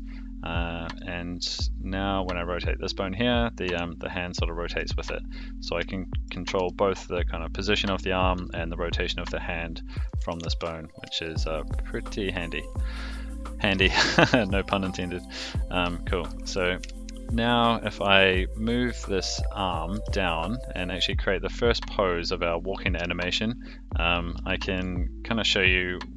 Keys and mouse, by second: 0.4 click, 0.8 r, 5.9-6.2 shift+middle drag, 6.5 g, 8.3 r, 9.9 a, 10.2 alt+g, 10.4 alt+r, 11.2 shift+middle drag, 11.6-12.3 middle drag, 13.0-13.7 middle drag, 13.9 shift+middle drag, 14.8 shift+middle drag, 15.2 middle drag, 15.8-16.3 shift+middle drag, 16.8 KP_1, 17.9 click, 19.9 g, 22.9 KP_3, 24.5 shift+middle click, 25.8 click.